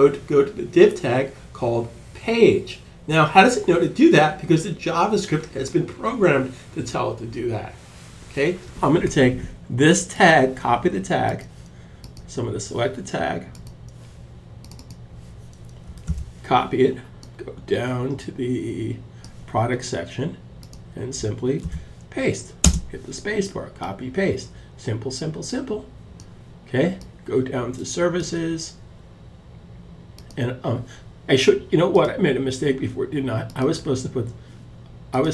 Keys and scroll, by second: 16.9 super+c, 20.9 super+v, 22.0 space.